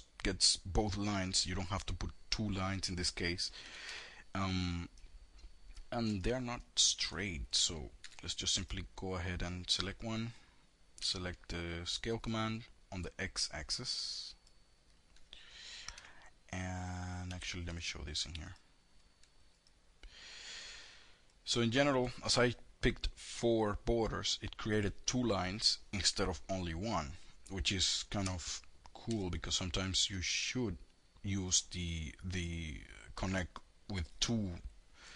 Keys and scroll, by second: 2.9 F3, 7.3 2, 10.2 r, 16.4 F4, 28.1 w.